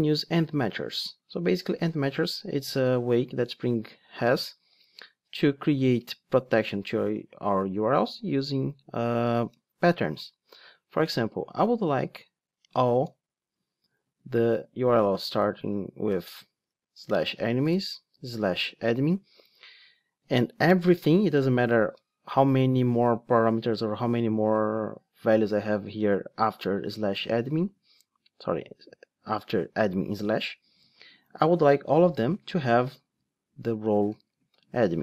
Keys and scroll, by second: 4.7 Return, 7.5 Tab, 33.7 Return.